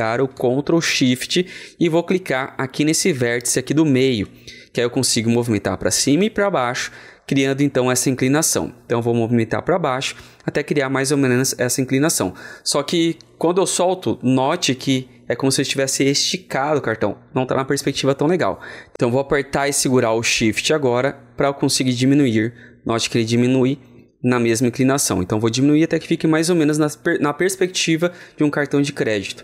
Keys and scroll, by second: 20.5 ctrl+alt+t.